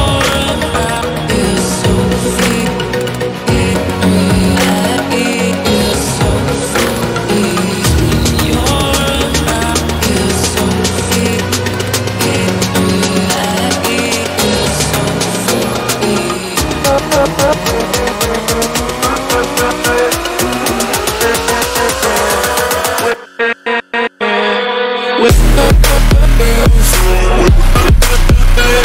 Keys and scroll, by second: 0.0-1.9 typing, 10.5 Left, 11.3 Delete, 11.7 2, 12.0 Return.